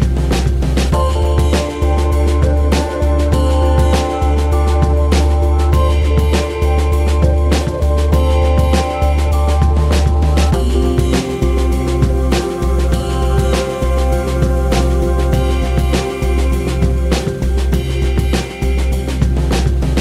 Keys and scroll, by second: 0.6 space, 7.0 KP_3, 7.5 space, 15.8 space, 16.4 space, 17.8 space.